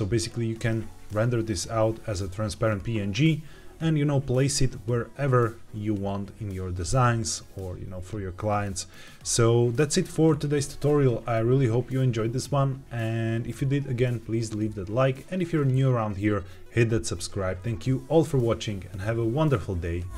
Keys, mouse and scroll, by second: 1.3-3.2 scroll up 1.